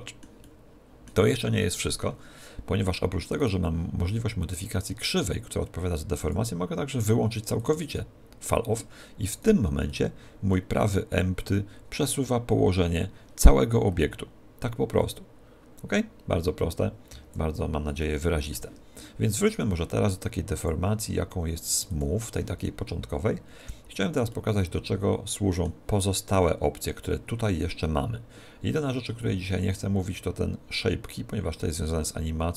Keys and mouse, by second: 3.4 right click, 6.3 click, 9.5 right click, 9.9-11.7 middle drag, 11.4 click, 18.1-19.5 middle drag, 19.5 right click, 20.6 click, 22.9-26.1 middle drag.